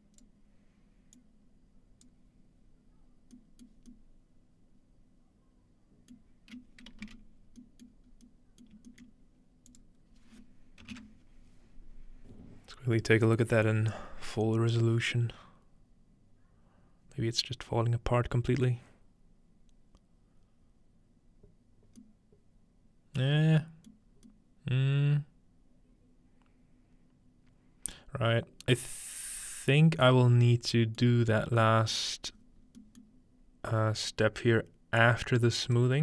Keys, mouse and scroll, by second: 1.2 click, 3.7 middle click, 7.0-7.6 middle drag, 7.0 z, 8.1 middle click, 8.1-9.6 scroll up 1, 8.8 shift+middle click, 9.1-9.8 middle drag, 9.7-11.5 drag, 22.0-26.8 middle drag, 25.3-26.8 scroll up 1, 31.4-33.1 scroll down 3, 33.6-35.0 scroll down 2, 35.0-36.0 drag.